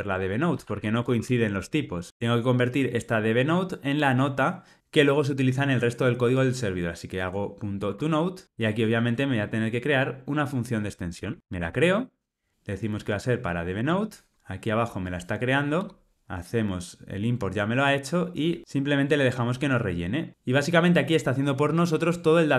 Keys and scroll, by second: 1.5 Return, 7.8 Tab, 11.5 alt+Return.